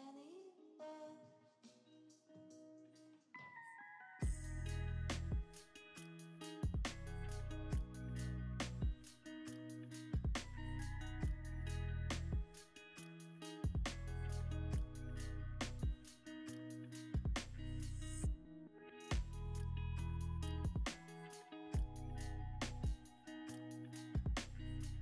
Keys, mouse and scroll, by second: 0.0 r, 0.3 x, 1.2 z, 6.7 s, 7.7 z, 7.7 g, 9.0 r, 12.1 g, 13.2 middle click, 16.5 scroll up 1, 16.6 middle click, 18.9 scroll up 1, 19.9-25.0 ctrl+alt+drag, 20.2 ctrl+alt+KP_0, 21.7 g, 22.7 y.